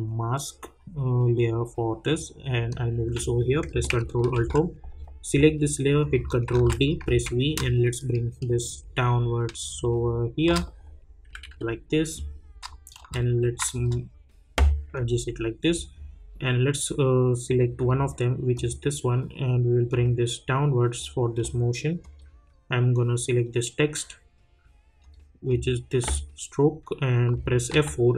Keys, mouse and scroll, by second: 4.3 ctrl+alt+Home, 6.0 click, 6.5 ctrl+d, 7.0 v, 7.5-11.3 drag, 11.3 Down, 12.9 shift+click, 13.7 shift+click, 14.9-22.0 drag, 25.0 click, 27.7 F4.